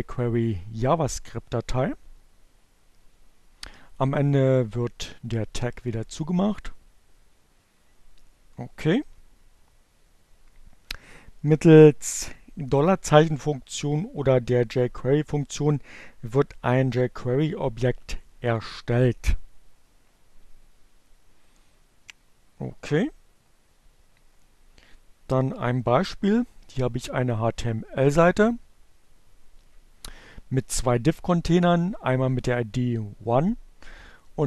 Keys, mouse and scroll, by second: 3.6 click.